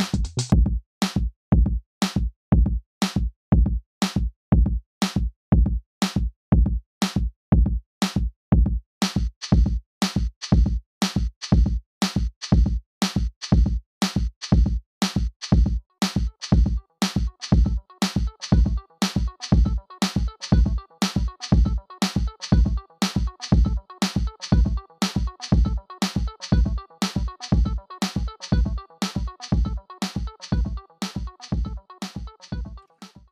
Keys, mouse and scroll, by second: 0.4 click, 2.7 click, 7.6 scroll down 1, 8.7-9.2 scroll up 1, 11.2 click, 12.5 scroll down 1, 13.0 click, 14.4 right click, 17.4-17.7 scroll down 1, 18.6 right click, 19.9 click, 21.7 click, 22.0-22.8 scroll down 1, 22.8 click, 27.8 click.